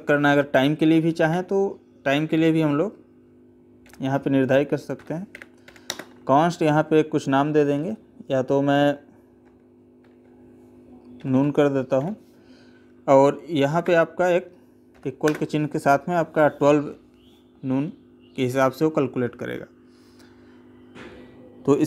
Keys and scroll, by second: 5.7 space, 13.6 space, 15.1 space.